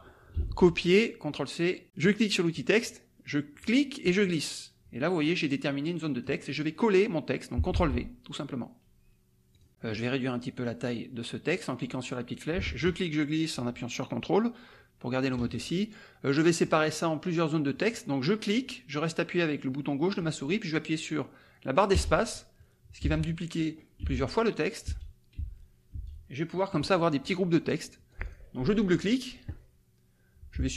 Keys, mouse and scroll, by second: 0.3 ctrl+c, 2.0 click, 3.6-6.4 drag, 7.7 ctrl+v, 9.5 click, 11.5-15.5 drag, 16.6-18.1 drag, 18.6-26.8 drag, 21.9 space, 23.0 space, 24.0 space, 24.8 space, 28.1 click, 28.8 click, 30.5 click.